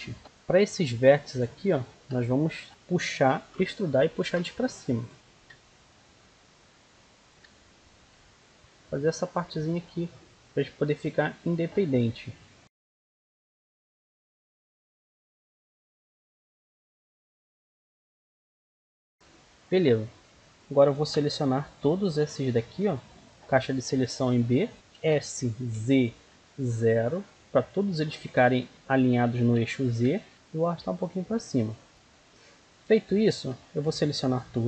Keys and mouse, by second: 1.1-2.2 right drag, 5.0 e, 5.1-6.8 drag, 6.8-8.6 right drag, 8.0 e, 8.6-9.6 drag, 9.6 middle click, 9.8 right click, 10.3 e, 10.4-12.2 drag, 12.2 middle click, 12.6 ctrl+r, 13.4 right click, 13.5-18.8 typing, 13.7 click, 13.9 middle click, 14.3 right click, 14.6 click, 15.0 click, 15.1 right click, 15.3 click, 15.7 right click, 16.0 click, 16.2 right click, 16.5 click, 16.8 right click, 17.1 click, 17.3 right click, 17.5 click, 18.7 right click, 19.1 middle click, 20.9 middle click, 21.1 a, 22.3 b, 24.8 s, 29.5 s, 30.4-31.9 drag, 32.6 a, 33.1 a.